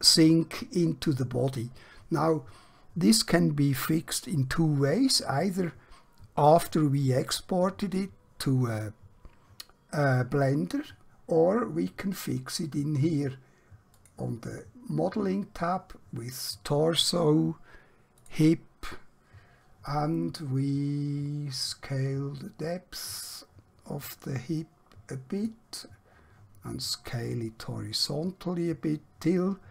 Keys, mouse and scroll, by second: 14.0 click, 16.4 click.